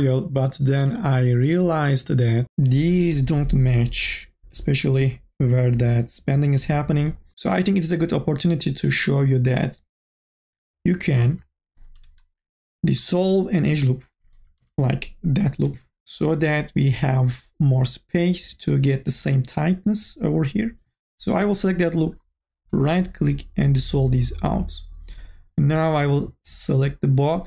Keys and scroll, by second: 9.9 q, 14.4 2, 14.8 e.